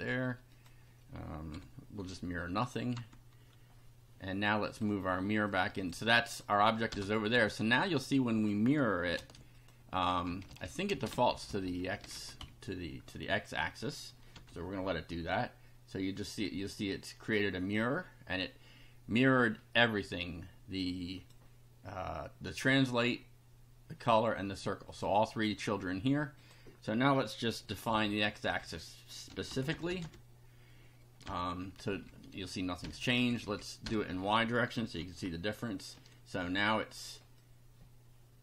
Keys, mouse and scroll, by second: 0.5 click, 1.5 ;, 2.6 click, 2.9 F5, 4.7 click, 5.5 click, 6.2 click, 6.9 BackSpace, 8.0 click, 9.2 ctrl+c, 9.6 ctrl+click, 10.3 Home, 10.5 ctrl+v, 10.9 ctrl+space, 11.0 ctrl+Down, 12.2 ctrl+shift+Home, 12.4 shift+Delete, 14.3 F5, 19.8-21.4 drag, 24.9 click, 26.4 click, 27.7-30.5 typing, 31.2 F5, 31.7 Left, 32.8 BackSpace, 33.0 1, 33.3 Left, 33.9 BackSpace, 34.1 KP_0, 35.0 F5, 37.4-38.4 drag.